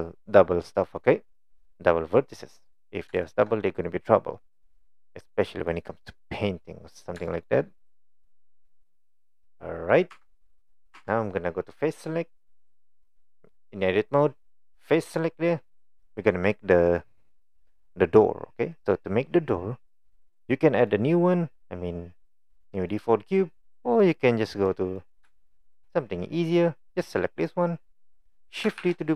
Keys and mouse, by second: 3.3 shift+middle click, 4.9 middle click, 7.3 shift+middle click, 8.4-9.9 middle drag, 10.2 Tab, 10.5-10.9 middle drag, 11.0 Tab, 20.2 middle click, 22.5 middle click, 24.1 middle click, 25.1 middle click, 25.4 shift+middle click, 27.4 click, 28.8 shift+d.